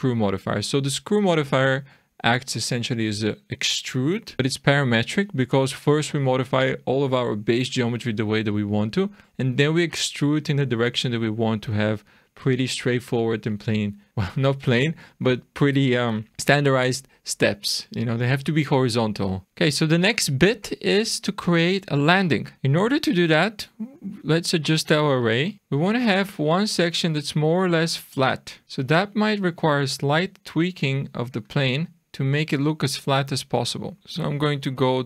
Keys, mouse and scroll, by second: 0.4 scroll up 1, 14.1-17.3 scroll down 3, 19.4 shift+middle click, 19.4-21.8 scroll down 3, 22.3-23.9 scroll down 2, 23.9 click, 25.4 click, 25.6-26.1 scroll up 3, 26.1 shift+middle click, 28.2 shift+scroll down 1, 28.6 click, 30.0 click, 33.9 click, 34.0 click, 34.0-34.7 scroll down 3, 34.7-35.0 scroll down 3.